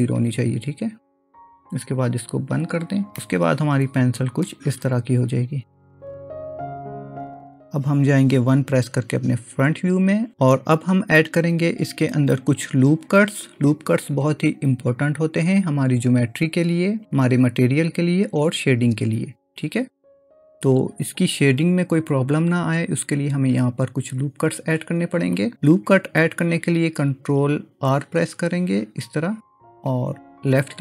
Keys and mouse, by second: 3.2-4.5 middle drag, 9.7 KP_1, 27.9 ctrl+r.